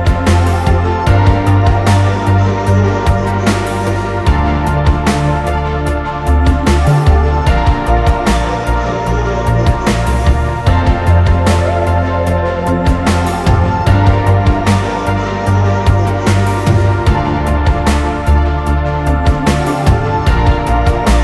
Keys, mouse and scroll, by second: 1.1-2.2 typing, 1.4 click, 2.3 click, 3.4 middle click, 3.6 middle click, 3.6-4.5 scroll down 2, 4.2 middle click, 4.7-5.1 typing, 5.9 middle click, 6.4-6.7 scroll up 1, 6.5-9.8 typing, 6.7-7.0 scroll down 1, 7.2 middle click, 8.7 middle click, 10.4 scroll down 2, 10.5 middle click, 12.1 ctrl+z, 12.2 ctrl+z, 12.3 ctrl+z, 12.4 ctrl+z, 13.1 space, 14.9-16.7 typing, 16.4 middle click, 18.9 space, 20.5-21.2 typing.